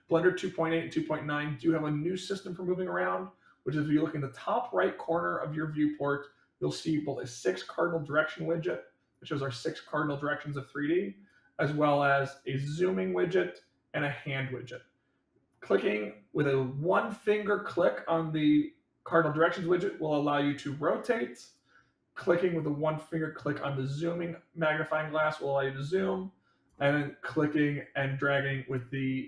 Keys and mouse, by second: 9.0-11.2 drag, 15.4-21.5 drag, 23.5-26.6 drag, 28.6-29.2 drag.